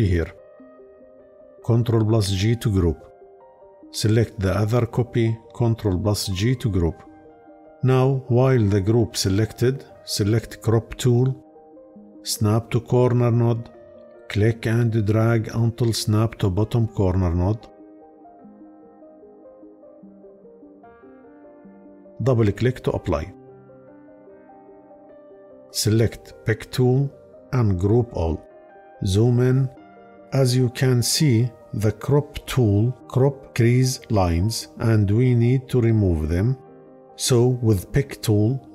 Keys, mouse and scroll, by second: 1.5 ctrl+g, 5.4 ctrl+g.